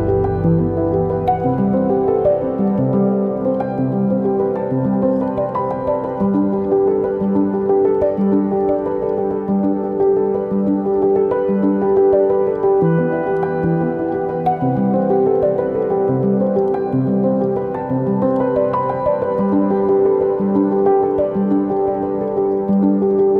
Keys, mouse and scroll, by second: 0.4 click.